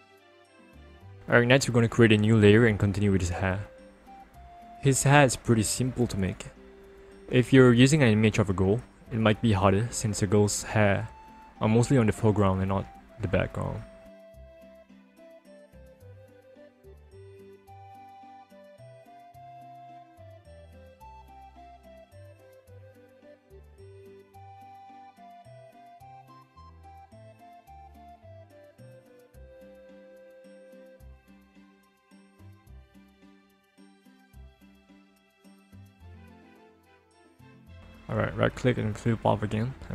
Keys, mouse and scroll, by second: 1.2 click, 2.2 click, 3.3 p, 4.4-6.2 ctrl+alt+scroll up 1, 6.2-7.6 scroll up 1, 8.0 click, 9.3 click, 12.4 click, 14.5 click, 15.7 click, 17.4 click, 20.1 click, 22.2 click, 24.8 click, 28.1 ctrl+click, 30.0 click, 30.2 alt+click, 30.8 alt+click, 31.8 alt+click, 36.2 click, 36.8 right click, 37.8 click, 39.7 click.